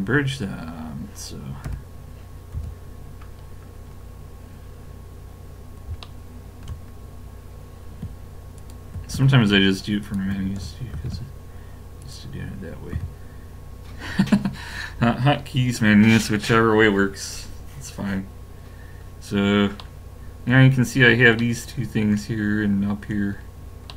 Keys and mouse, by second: 2.6 a, 3.3-5.7 middle drag, 6.1 middle click, 8.4 middle click, 8.6-11.9 drag, 11.0 ctrl+e, 12.9 a, 19.2-21.7 middle drag.